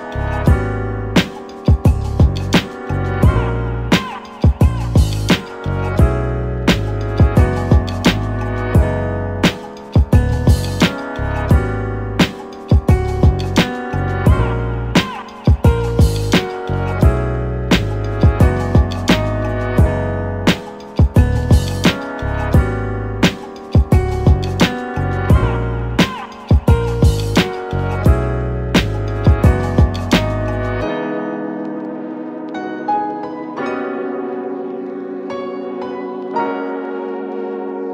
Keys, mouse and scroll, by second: 1.0 click, 2.8-3.6 drag, 4.1-5.5 drag, 11.2 click, 22.2-22.8 middle drag, 22.8-27.0 scroll up 3, 28.3 click, 34.0 click, 34.9-37.4 drag.